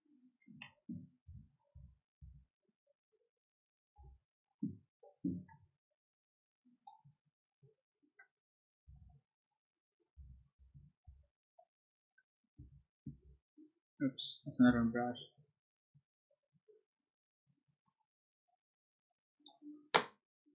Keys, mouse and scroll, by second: 1.2 p, 1.7 o, 3.9 b, 4.9-6.8 drag, 8.8 o, 11.0 p, 13.0 l, 14.6 b, 15.0-19.4 drag.